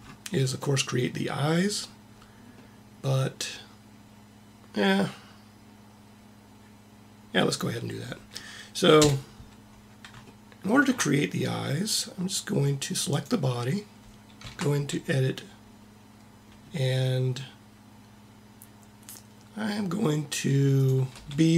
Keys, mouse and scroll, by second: 2.4-3.9 middle drag, 8.9 KP_1, 12.9-14.3 drag, 14.3 Tab, 20.6-21.5 drag, 21.0 b.